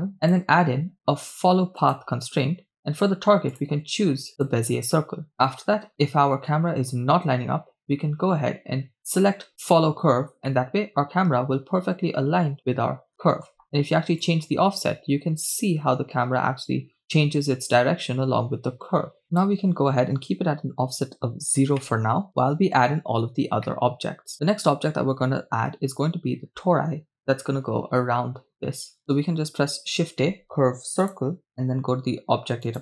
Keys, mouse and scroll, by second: 0.3-3.2 drag, 3.5-4.5 drag, 5.6 middle click, 6.0-6.4 scroll up 3, 6.4-7.6 shift+middle drag, 9.8 click, 12.5 middle click, 13.3 shift+middle drag, 14.5-19.2 drag, 20.8 click, 23.7-24.3 middle drag, 24.5-24.9 shift+middle drag, 29.7 shift+a, 32.7-32.8 drag.